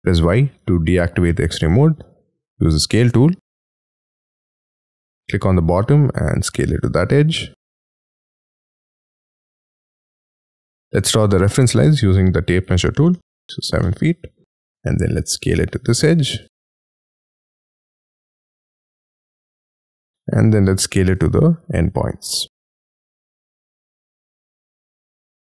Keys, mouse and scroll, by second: 0.5 y, 0.8 y, 1.2 middle click, 2.0 middle click, 2.0 s, 3.9 y, 10.5 y, 10.7 middle click, 10.8 ctrl+z, 12.6 7, 13.1 ', 13.3 Return, 13.8 middle click, 14.4 space, 14.6 s, 19.6-20.5 typing.